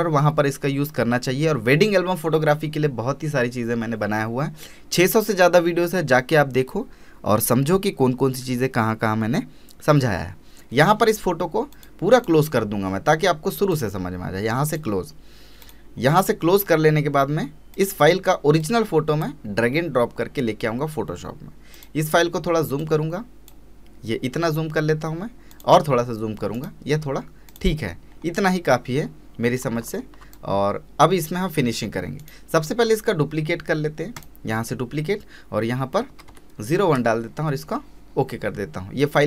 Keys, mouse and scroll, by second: 11.7-24.3 drag, 24.3 scroll up 1, 24.4-25.5 scroll down 1, 25.5 click, 26.5 right click, 27.5 click, 28.1 scroll down 1, 28.2-28.7 scroll up 1, 29.8 space, 29.9 scroll up 1, 30.3 space, 32.2 right click, 34.1 click.